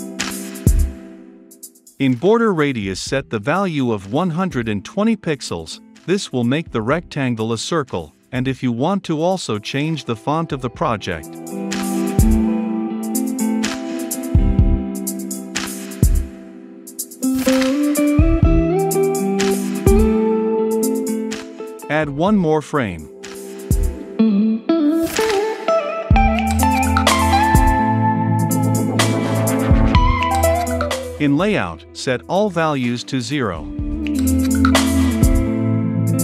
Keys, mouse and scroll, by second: 18.7 l, 20.2 Return, 20.2-21.2 typing, 22.0-23.6 drag, 23.6-27.0 right drag, 27.0-36.0 drag, 36.0-36.2 middle drag.